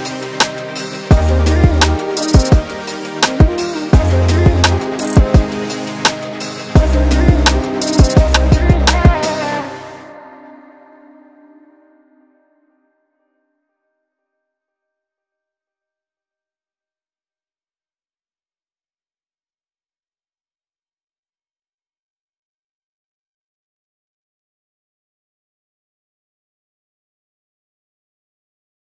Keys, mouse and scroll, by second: 1.4 middle click, 2.2 middle click, 2.7 middle click, 5.4 middle click, 7.5-8.1 scroll up 1, 8.1 middle click.